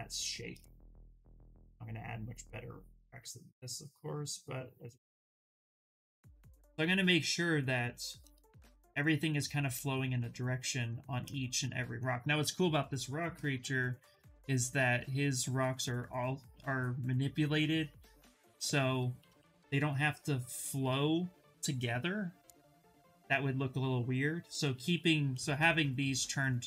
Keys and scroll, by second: 25.4 w.